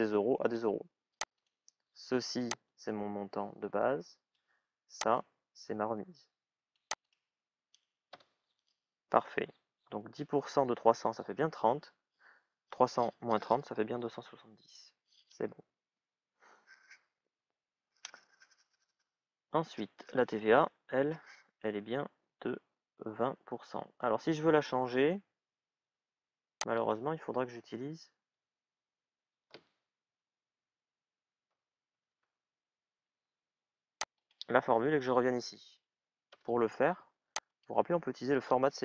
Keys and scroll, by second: 8.0 Return, 30.4 shift+é, 31.3 shift+à, 32.0 Return, 36.1 Return.